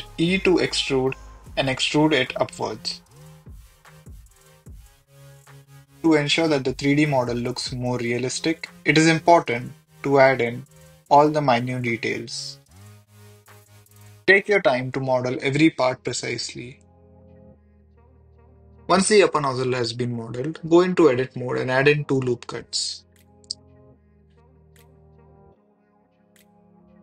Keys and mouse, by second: 0.2 g, 0.2 z, 2.1 g, 2.1 z, 3.7 Tab, 4.0 e, 4.1 z, 7.2 g, 7.3 z, 7.4 click, 7.6 e, 8.4 click, 8.9 s, 9.9 g, 10.0 z, 10.2 click, 11.1-13.6 typing, 11.8 click, 12.9 click, 13.2 click, 13.6 click, 15.2 click, 15.9 e, 15.9 s, 16.1 click, 16.3 e, 16.3 z, 18.6 e, 18.6 z, 18.8 click, 18.9 s, 19.2 click, 19.2 Tab, 19.5 middle click, 20.5 s, 21.3 click, 22.1 click, 22.2 click, 22.3 Tab, 22.3 KP_1, 22.7 ctrl+r, 22.8 click, 24.4 click, 24.5 ctrl+r.